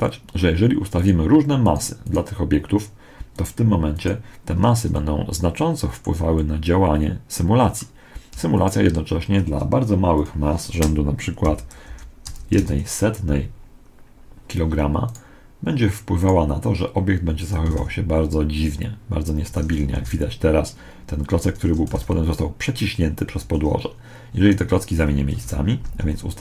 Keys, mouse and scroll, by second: 4.9-8.2 middle drag, 4.9-5.9 right drag, 10.0-11.8 right drag, 10.1 click, 14.9-18.3 right drag, 17.6 alt+a, 19.2 Escape, 19.9 alt+a, 20.5-22.7 middle drag, 21.2 Escape, 21.8 alt+a, 23.1 Escape, 25.3 KP_1, 26.3 g.